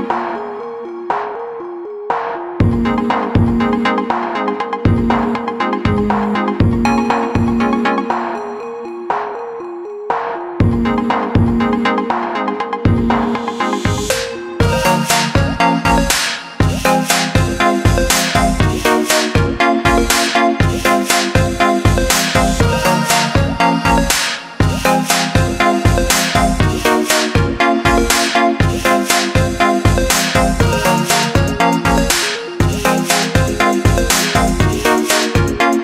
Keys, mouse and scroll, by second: 0.2 click, 2.3 click, 3.1 click, 3.8 click, 5.2 click, 8.2-10.5 typing, 8.7 click, 9.2 click, 9.8 click, 10.3 click, 11.4 click, 12.0 i, 12.3 click, 12.4 a, 12.9 click, 13.3 right click, 14.0 click, 14.8 right click, 15.6 click, 16.3 right click, 17.1 click, 17.5 scroll down 1, 18.3 click, 19.8 i, 20.0 click, 20.3 a, 20.5 click, 22.4 click, 24.9 i, 26.1 click, 26.6 a, 27.1 click, 27.4 i, 27.6 click, 27.9 a, 28.3 click, 31.7 i, 32.0 click, 32.8 z, 33.4 click.